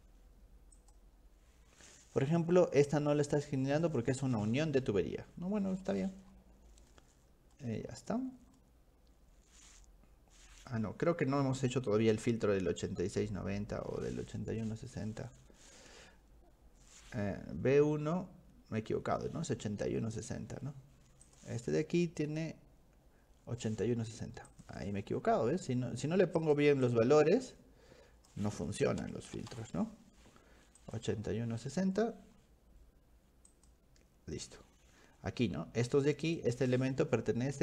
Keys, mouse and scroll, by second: 0.8 click, 5.8 scroll down 1, 5.9-6.5 scroll up 4, 6.9-8.1 scroll up 3, 8.6-10.7 middle drag, 19.8-20.7 scroll up 6, 21.3 click, 24.5 click, 26.4 click, 26.9-28.3 drag, 28.3-29.9 typing, 30.8 click, 33.5 click, 34.8-35.5 scroll up 3, 36.3 click.